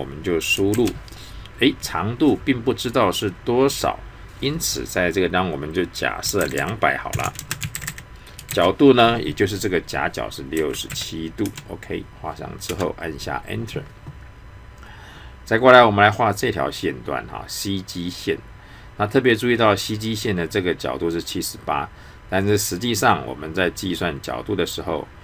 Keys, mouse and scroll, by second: 0.7 shift+2, 6.2 typing, 7.6-8.5 typing.